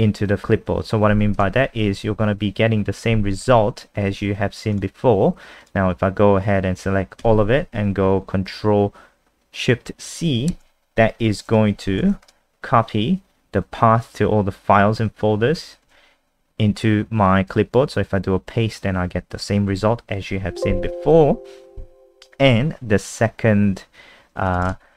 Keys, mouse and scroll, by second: 1.6 F5, 3.4 F3, 4.8 click, 7.2 ctrl+a, 11.5-12.6 typing, 15.9 ctrl+v, 20.5 alt+F4, 21.1 n, 24.5 click.